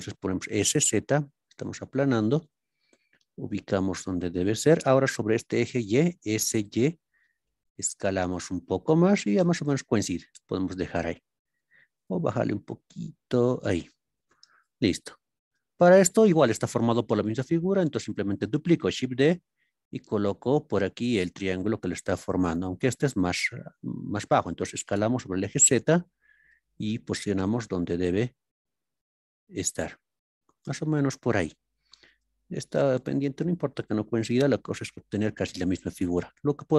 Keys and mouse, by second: 0.6 z, 2.4 click, 3.1 g, 4.4 click, 6.6 y, 9.2 click, 12.0 z, 13.6 click, 15.4 shift+middle click, 18.8 shift+d, 22.6 click, 26.4 g, 26.8 z.